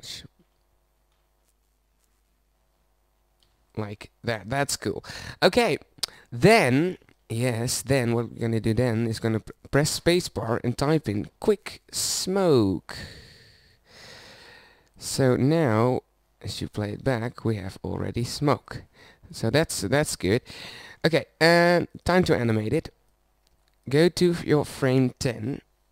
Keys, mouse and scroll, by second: 0.1-2.3 drag, 4.9 Tab, 11.1 space, 15.0 middle click, 15.8-18.3 middle drag.